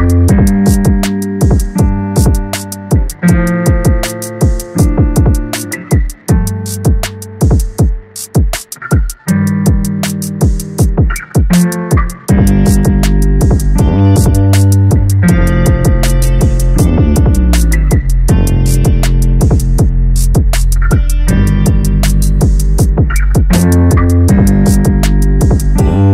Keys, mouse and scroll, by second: 0.8 s, 2.7-3.6 scroll down 5, 3.6 KP_7, 4.2-5.3 scroll down 13, 5.3 g, 6.5 KP_0, 7.3 g, 8.5-9.0 scroll up 1, 9.0 g, 10.4-11.4 scroll up 2, 11.4 click, 11.8-12.3 scroll up 1, 12.3-12.8 shift+middle drag, 12.8-13.6 scroll down 1, 13.6 click, 13.9 scroll up 1, 14.2 Tab, 14.5 scroll up 2, 15.2 2, 15.5 click, 15.7 click, 16.1 s, 17.1 click, 17.3 click, 17.8-19.6 typing, 19.1 Tab, 19.7-21.5 scroll down 2, 21.5 click, 22.5-23.0 drag, 23.0-24.5 scroll up 14, 24.5 click.